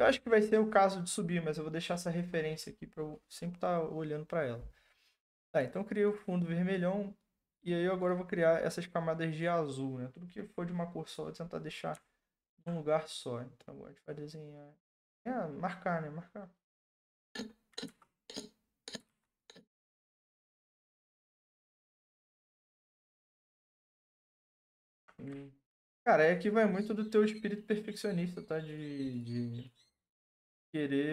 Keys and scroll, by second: 17.8 ctrl+z, 19.1 ctrl+z.